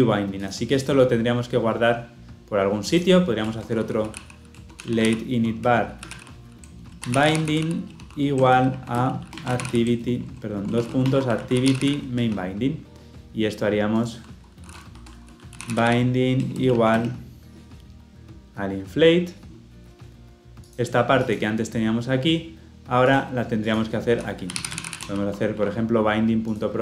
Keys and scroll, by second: 25.4 Escape.